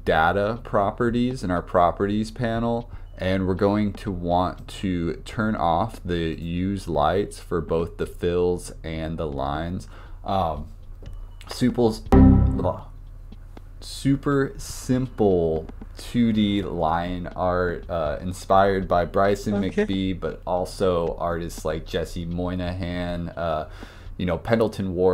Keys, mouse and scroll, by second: 4.6-7.9 drag, 8.1 click.